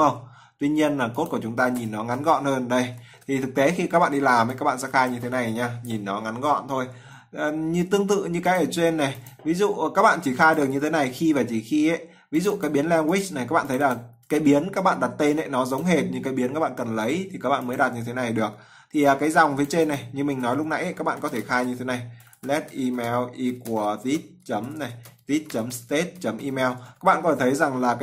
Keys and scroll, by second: 2.8 ctrl+s.